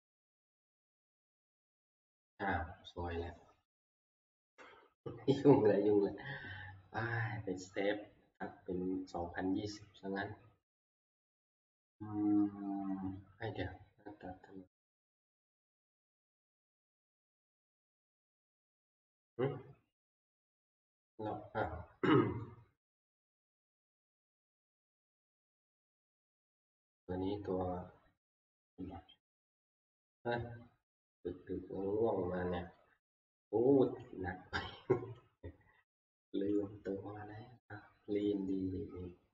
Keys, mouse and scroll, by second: 15.3-20.1 drag, 22.2-23.5 scroll down 1, 23.5-23.9 scroll down 4, 23.9-24.5 scroll, 25.3 scroll, 26.7-27.3 scroll, 27.4-28.2 scroll, 29.9 F11, 33.1 click, 33.3 click, 34.0 click.